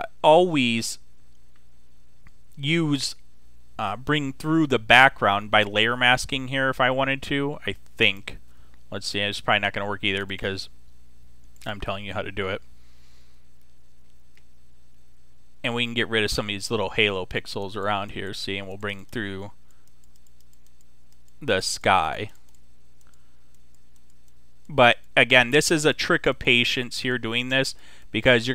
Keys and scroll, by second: 13.3 [, 19.9 [.